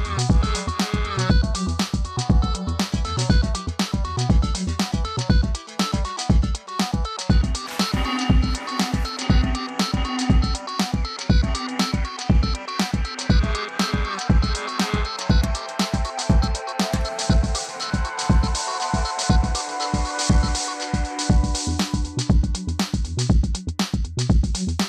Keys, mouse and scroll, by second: 2.7-3.4 scroll up 1, 3.4 click, 4.3 click, 6.2 click, 9.3 click, 11.9 click, 15.2 click, 18.1 click.